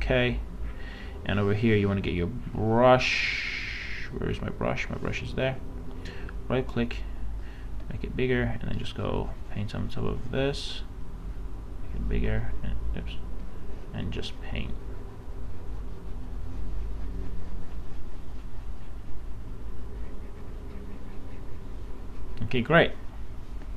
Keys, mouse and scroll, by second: 5.9 right click, 6.7-11.1 drag, 11.1 right click, 11.7 click, 11.9 space, 12.5 space, 13.8 space.